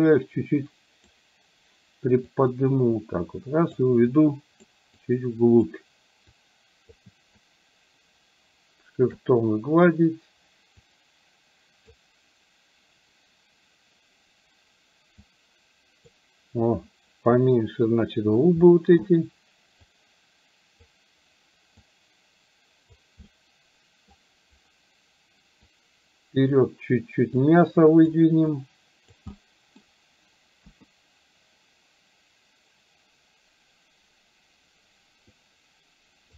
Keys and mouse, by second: 0.0-1.2 drag, 2.3-3.8 drag, 4.3 click, 5.0 click, 6.3 click, 7.5-9.2 shift+drag, 10.8-12.0 drag, 15.3 click, 18.6 middle click, 19.8-20.8 drag, 21.8-23.1 drag, 23.3 middle click, 25.7 click, 27.5 click, 28.6 click, 29.3 middle click, 30.6 KP_1, 35.3-36.3 drag.